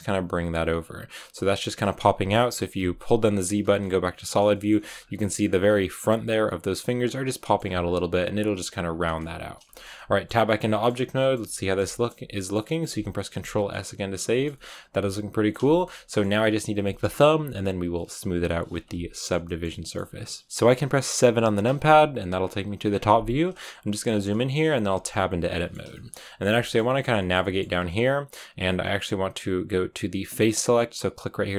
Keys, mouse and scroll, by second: 2.0 z, 3.5 z, 3.7 middle click, 4.7 g, 5.1 middle click, 5.4 g, 6.1 scroll up 1, 6.2 scroll down 3, 6.3 middle click, 6.8 g, 7.2 scroll up 1, 7.2 middle click, 7.6 g, 9.0-9.5 scroll down 3, 9.6 shift+middle click, 10.2-11.1 scroll down 7, 10.6 shift+middle click, 11.1-12.8 shift+middle drag, 12.8-13.6 scroll down 3, 13.6-15.8 middle drag, 15.8 scroll up 4, 16.0-21.1 middle drag, 21.1 KP_7, 22.5 scroll up 5, 23.5 shift+middle click, 24.0-24.8 scroll up 4, 24.8 Tab, 24.9 scroll down 2, 25.2 middle click, 26.1-27.5 middle drag, 27.5-31.5 scroll down 1.